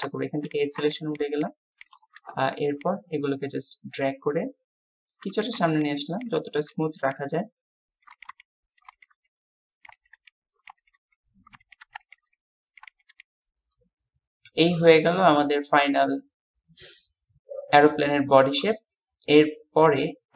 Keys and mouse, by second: 5.1 click, 5.1 typing, 8.1 click, 8.2 alt+shift+click, 8.5 click, 9.0 alt+shift+click, 9.3 click, 9.9 alt+shift+click, 10.7 click, 11.9 click, 13.0 alt+shift+click, 13.3 click, 13.7-19.0 drag.